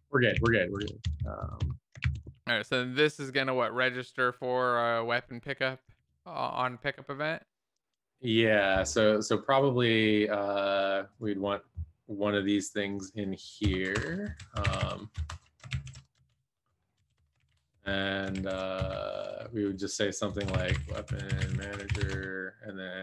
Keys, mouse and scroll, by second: 0.4 ctrl+s, 0.6 Right, 0.7 End, 1.0 Left, 1.1 Left, 1.4 Right, 3.3 ctrl+s, 3.3 Down, 3.3 Up, 4.7 ctrl+s, 4.7 Up, 5.1 Tab, 14.1 Return, 14.1 Left, 15.1 Return, 15.1 shift+f, 16.1 ctrl+space, 16.9 Down, 17.1 Return, 17.4 ctrl+s, 17.4 End, 17.7 Return, 18.3 ctrl+z, 18.8 space, 20.4-23.0 typing.